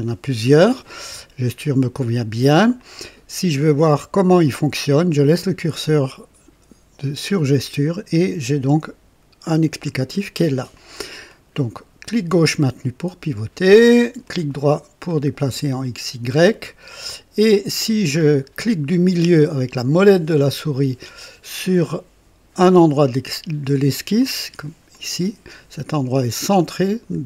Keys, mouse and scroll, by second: 2.7 click, 10.6 click, 11.2-14.4 drag, 14.5-18.3 right drag, 21.1 right click, 24.1 middle click, 24.8-27.2 drag.